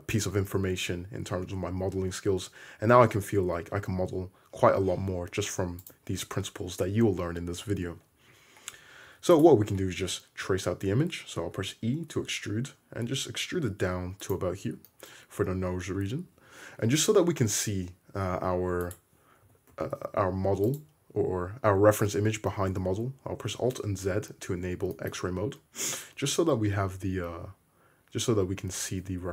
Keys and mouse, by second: 3.0 g, 9.1 2, 9.4-11.6 middle drag, 11.6 e, 14.9 shift+middle drag, 15.1-18.9 middle drag, 19.0-20.1 middle drag, 19.5 g, 20.8-21.9 middle drag, 24.0 alt+z, 29.2 1.